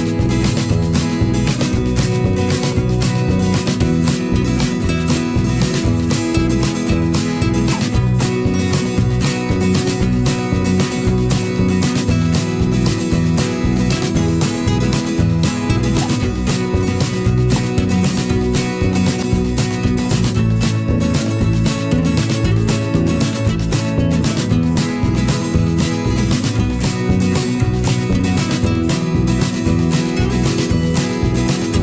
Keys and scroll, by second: 6.4 Return, 8.6 ctrl+s, 23.8 Return, 25.3 ctrl+s.